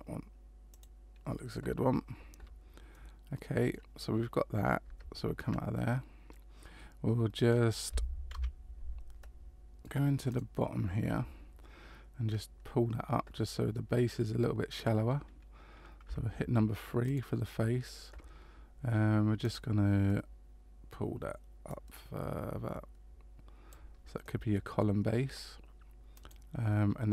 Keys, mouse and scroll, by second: 2.9 middle click, 4.8 Tab, 6.3 middle click, 8.3 KP_Decimal, 9.2 middle click, 9.2 scroll up 1, 10.3 right click, 11.1 Tab, 12.2-13.3 scroll down 1, 13.3 scroll down 2, 16.0 3, 17.0 right click, 19.4 click, 20.1 middle click, 21.7 click, 24.2 middle click, 26.1 right click.